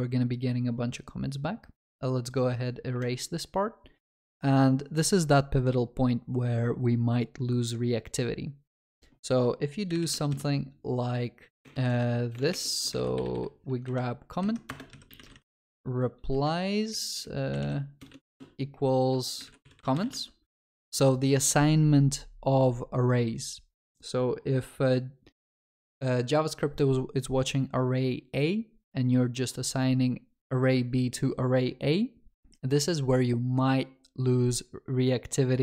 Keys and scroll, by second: 11.6 ctrl+BackSpace, 14.6 ctrl+BackSpace, 20.7 ctrl+s.